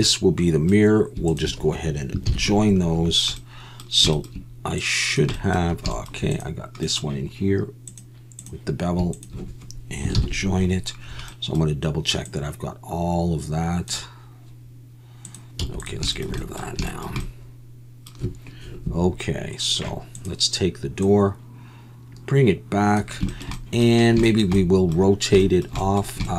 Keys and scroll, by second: 2.3 ctrl+j, 10.2 ctrl+j, 15.6 x.